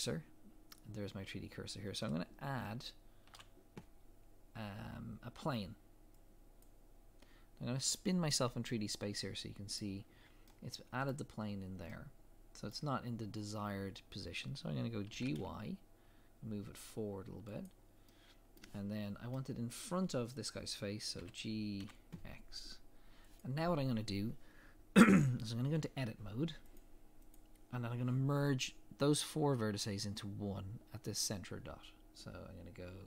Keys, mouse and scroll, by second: 6.6 shift+a, 8.7 middle click, 10.1 scroll down 1, 10.5 middle click, 15.2 g, 18.1 middle click, 21.2 g, 27.4 click.